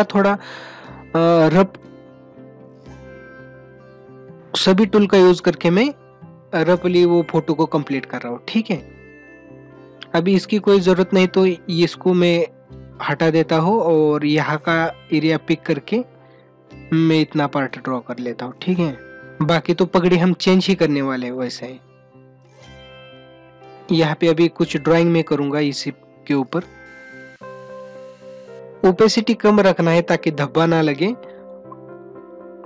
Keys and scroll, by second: 22.9 ], 24.1 ], 27.6 ], 28.4 ].